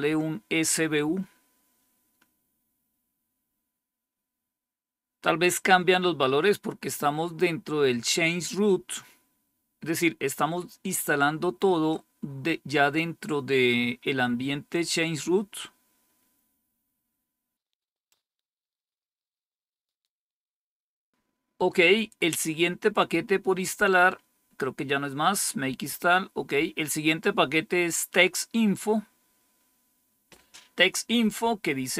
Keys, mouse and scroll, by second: 24.1-26.5 scroll down 5, 27.0 click.